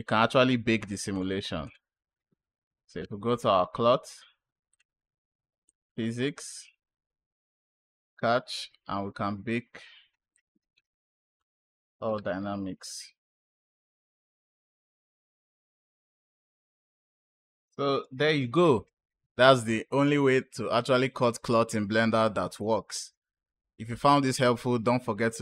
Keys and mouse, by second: 0.1 click, 1.0 click, 1.5 click, 4.6 click, 5.5 click, 7.4 click, 10.2 click, 11.3-16.0 drag, 16.7 click.